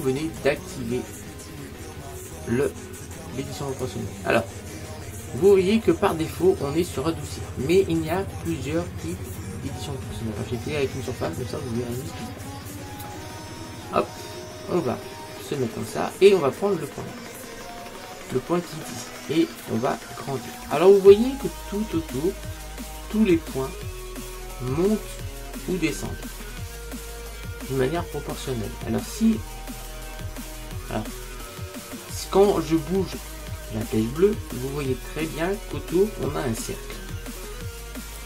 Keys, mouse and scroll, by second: 5.5 click, 12.5-18.5 middle drag, 19.0 click, 35.5 click.